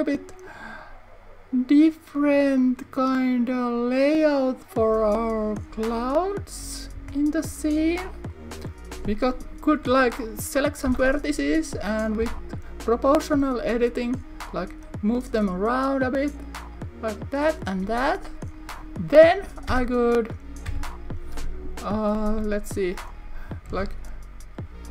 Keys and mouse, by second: 3.8 click, 4.8 click, 6.1 click, 7.1 Tab, 12.3 g, 15.2 click, 16.7 click, 17.4 click, 18.6 click, 19.8 Tab, 20.8 Tab, 22.3 l, 23.8 shift+d.